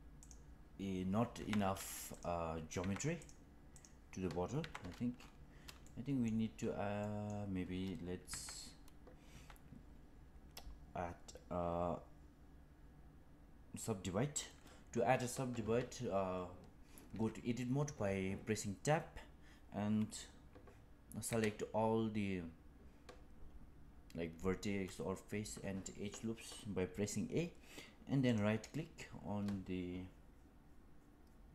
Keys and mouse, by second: 1.3 Tab, 2.7 Tab, 3.1 click, 4.5 Tab, 5.8 shift+middle click, 6.9 middle click, 8.2 Tab, 9.2 Tab, 15.5 Tab, 17.0 Tab, 21.2 a, 28.2-31.5 right drag.